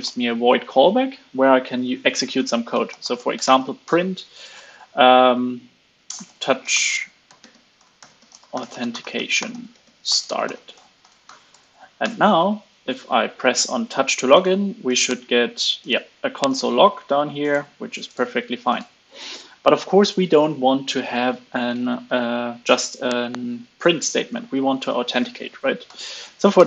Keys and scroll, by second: 11.4 super+s, 11.9 alt+super+l, 12.2 super+s, 25.8 super+Right.